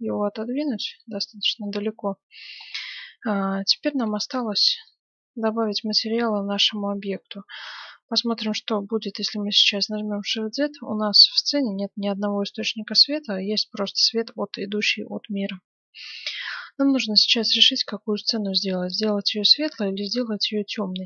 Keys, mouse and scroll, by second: 0.1-1.8 drag, 1.9-7.3 middle drag, 7.3-7.8 scroll down 1, 7.8-9.8 middle drag, 8.6 shift+z, 17.1-19.1 middle drag, 19.5-21.0 middle drag.